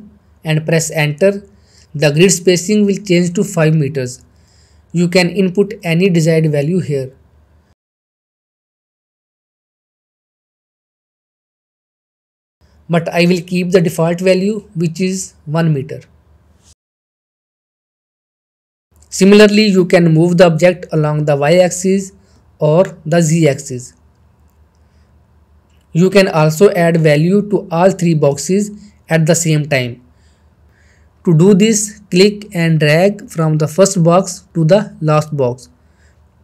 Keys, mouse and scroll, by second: 1.1-3.4 scroll down 1, 3.9 click, 8.4 click, 12.7 click, 13.8 click, 16.2 scroll up 2, 16.6-16.9 shift+middle drag, 16.9 scroll down 2, 17.0 shift+middle click, 17.2 click, 18.1-18.4 click, 18.5 ctrl+z, 18.6 click, 19.9-20.6 shift+middle drag, 21.3-22.8 drag, 23.0 ctrl+z, 24.1-26.0 drag, 25.9 ctrl+z, 28.7-36.4 drag.